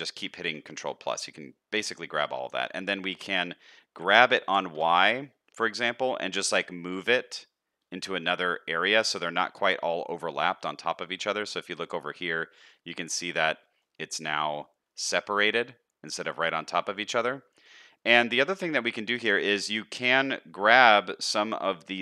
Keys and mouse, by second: 1.7 shift+middle click, 2.3 middle click, 2.8 shift+middle click, 3.2 middle click, 4.0 g, 9.6 middle click, 10.3 shift+middle click, 10.8 middle click, 11.2 shift+middle click, 12.1 shift+click, 12.7 middle click, 13.7 shift+click, 14.1 middle click, 14.9-16.1 middle drag, 17.5 shift+click, 17.9-19.1 middle drag, 19.6 shift+middle click, 21.4 middle click.